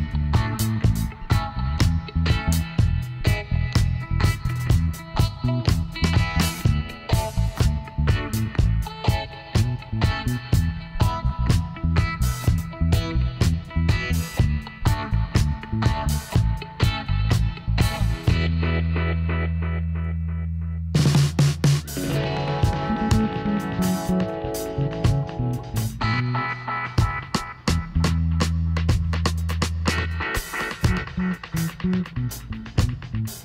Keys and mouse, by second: 2.7-6.0 middle drag, 6.0-7.6 right drag, 7.1 l, 7.6-8.7 middle drag, 8.7 KP_7, 9.8 middle click, 11.7-13.5 drag, 15.6-17.6 middle drag, 17.7-19.4 drag, 18.7-22.2 right drag, 21.7 s, 23.9 middle click, 25.1-27.0 middle drag, 27.0 Tab, 27.6 middle click, 28.5 Tab, 30.3 ctrl+r, 32.7 ctrl+r.